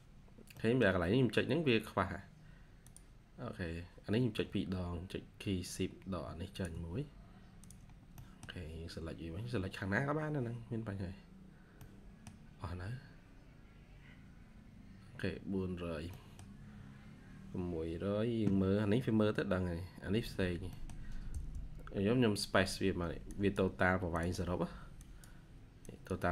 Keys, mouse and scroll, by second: 0.5 middle click, 1.7-2.5 scroll up 1, 6.4 shift+click, 7.8 scroll down 1, 8.0 middle click, 9.3-10.3 scroll down 1, 11.6 middle click, 14.2 scroll up 1, 15.0 scroll down 1, 16.0 middle click, 19.6-20.0 scroll up 1, 20.3-20.6 scroll down 1, 20.6 middle click, 21.2 scroll down 1, 21.2 space, 24.2 typing.